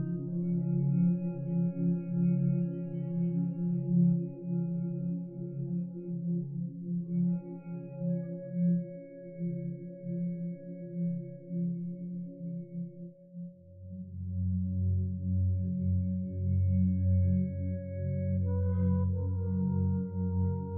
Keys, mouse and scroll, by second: 6.1 Escape, 16.8 3, 17.0 Return.